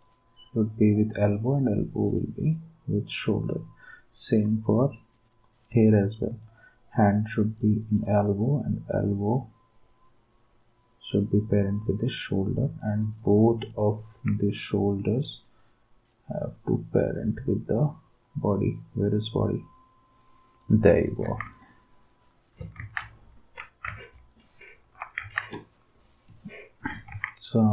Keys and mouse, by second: 21.2 ctrl+s, 22.8 ctrl+s, 25.1 ctrl+s, 27.1 ctrl+s.